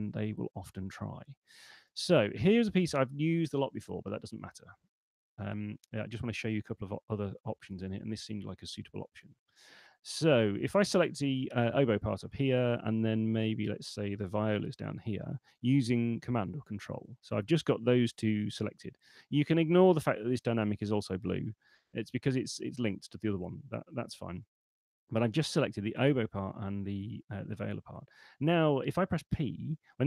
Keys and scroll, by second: 29.6 r, 29.9 p.